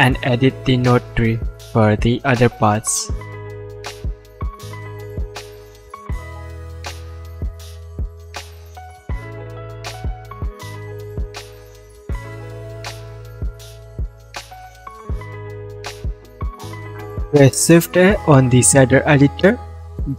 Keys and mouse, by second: 5.2 click, 5.3-9.0 middle drag, 9.0 click, 9.1-12.4 middle drag, 12.4 click, 12.5-14.9 middle drag, 14.9 click, 15.0-16.9 middle drag, 16.9 click, 17.5 click, 18.2 shift+a, 19.9 f.